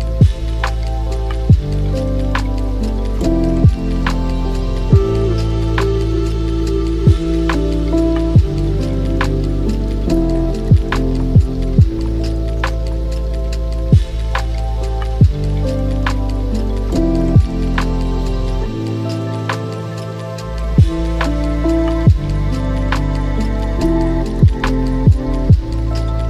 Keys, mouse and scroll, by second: 0.9 ctrl+r, 6.3 click, 6.8-8.7 middle drag, 8.7-17.4 drag, 17.4 middle click, 18.1 shift+click, 18.2 shift+click, 18.5-19.9 middle drag, 19.9 e.